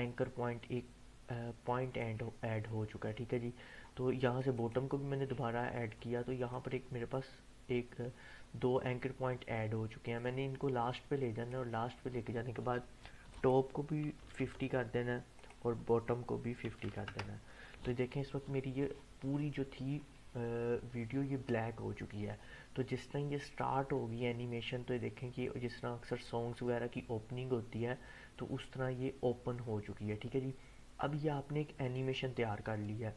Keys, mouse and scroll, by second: 23.3-33.1 drag.